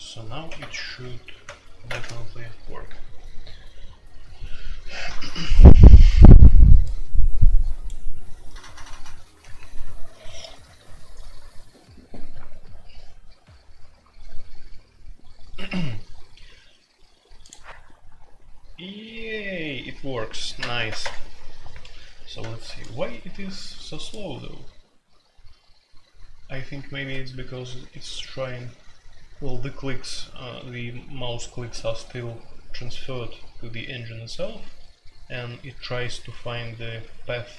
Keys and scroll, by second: 0.0-1.9 typing, 20.8 alt+p, 21.0 Return.